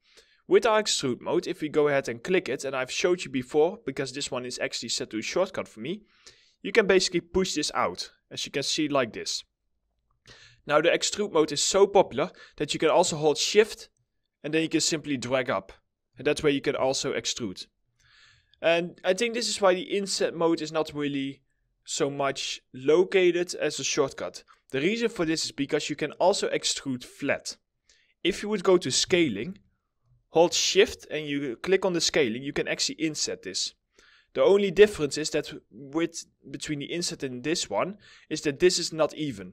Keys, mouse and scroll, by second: 10.0 w, 10.5 middle click, 11.1 alt+middle click, 12.5 alt+middle click, 13.4 shift+click, 16.4 alt+middle click, 25.6 middle click, 28.7 r, 29.1 alt+middle click, 31.3 shift+click, 36.6 alt+middle click, 38.9 alt+middle click.